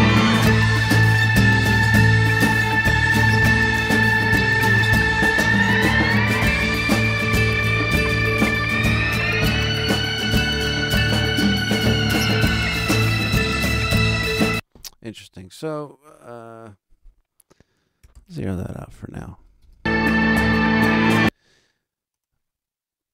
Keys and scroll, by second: 14.3 space, 19.5 alt+space, 21.0 space.